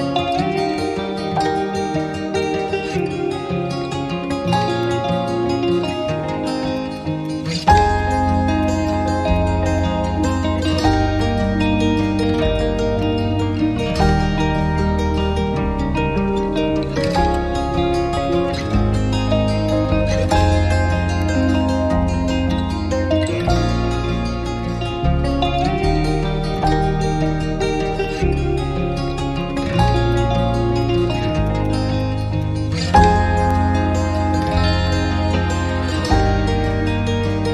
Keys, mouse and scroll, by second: 0.4-0.9 scroll up 1, 1.0 alt+middle click, 1.3 scroll down 1, 1.5-2.0 scroll up 1, 3.3 scroll up 1, 3.4 scroll down 1, 3.8 alt+middle click, 3.9 alt+click, 4.5 alt+click, 4.5 middle click, 6.9 double click, 11.6-12.7 scroll down 1, 23.3 alt+click, 26.3 scroll down 1, 26.5 alt+click, 27.9 alt+middle click, 28.6 alt+click, 29.2 alt+click, 29.2 scroll down 1, 29.5 alt+middle click, 31.6 double click.